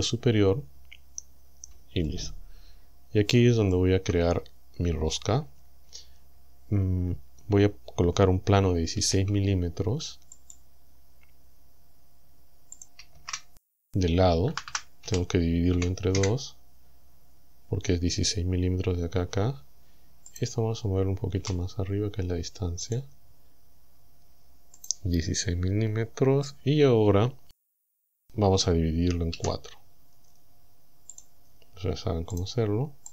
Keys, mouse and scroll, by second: 2.1-4.0 shift+drag, 9.0 shift+a, 10.4 click, 12.8 click, 13.0 KP_1, 14.5 m, 15.1 KP_Divide, 15.8 KP_2, 16.2 KP_Enter, 20.3 right click, 21.4 g, 22.9 click, 24.8 right click, 28.0 Tab, 29.4 w, 31.2 click, 32.4 right click.